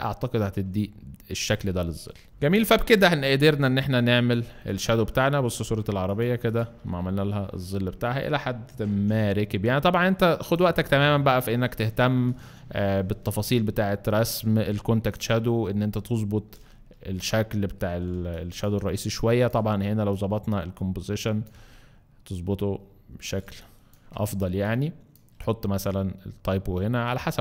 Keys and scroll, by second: 8.9 v, 13.2 Up, 13.5 Up, 13.8 Up, 15.7 Up, 16.1 Up, 18.1 alt+space, 23.4 space.